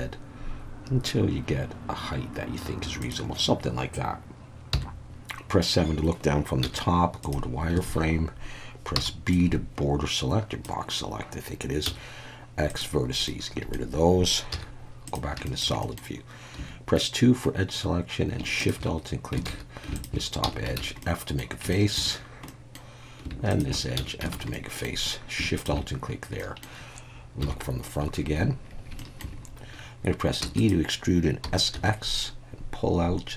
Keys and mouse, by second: 3.0 click, 4.7 KP_7, 6.6 z, 7.8 alt+a, 8.9 b, 11.8 x, 13.2 middle click, 14.5 z, 15.4 shift+middle click, 15.8 middle click, 16.6 2, 19.5 alt+a, 20.4 f, 20.8 alt+a, 21.0 middle click, 21.7 shift+middle click, 22.5 middle click, 23.4 shift+a, 24.0 f, 24.3 alt+a, 24.5 middle click, 26.4 middle click, 28.1 KP_1, 29.0 shift+middle click, 30.4 e, 30.6 click, 31.4 s, 31.7 x.